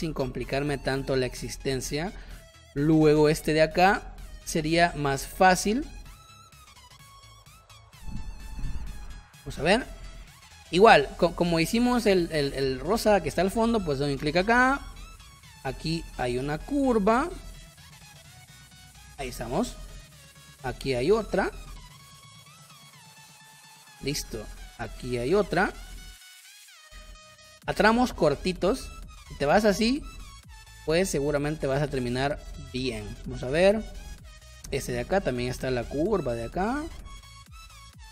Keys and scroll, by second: 2.4 space, 3.4 space, 9.4 space, 19.4 space, 23.5 space, 28.3 space, 33.5 space, 36.4 space.